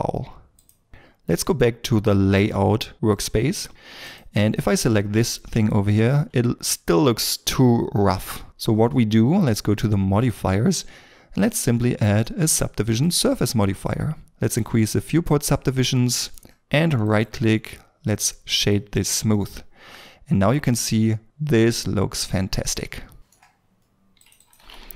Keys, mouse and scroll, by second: 4.6 scroll up 1, 5.1 middle click, 6.0 shift+middle click, 15.7 middle click, 17.0 right click, 19.3 middle click, 24.4 double click, 24.6 typing.